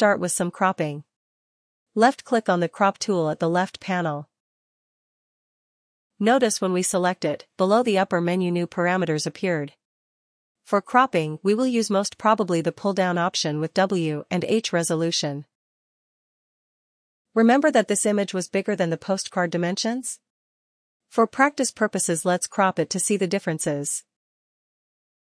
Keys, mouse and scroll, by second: 2.8 click, 10.3 click, 13.1 click, 14.8 click, 24.4 click.